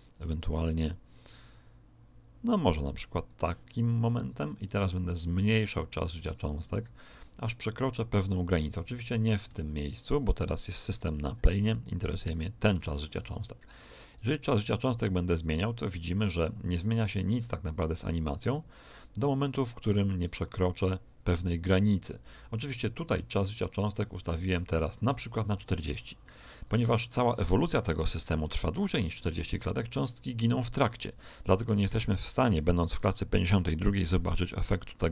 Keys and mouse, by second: 4.6 click, 12.2 right click, 13.9 click.